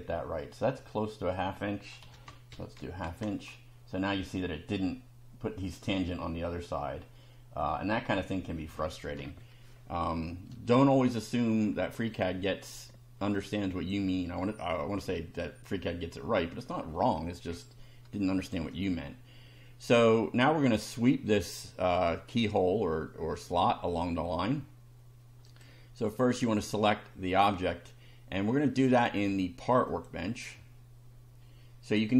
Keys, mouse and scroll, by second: 0.9 click, 2.1 KP_1, 2.3 KP_Divide, 2.5 KP_2, 7.6 click, 8.5 click, 9.1 scroll down 1, 9.7 scroll up 1, 12.2 shift+middle click, 13.3 click, 18.4 click, 20.1 scroll down 1, 25.5 click, 26.5 click, 28.7 click, 29.9 click.